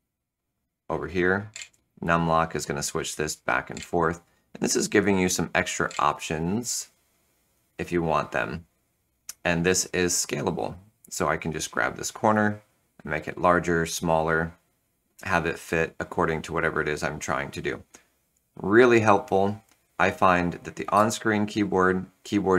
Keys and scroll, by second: 20.8 ctrl+super+o.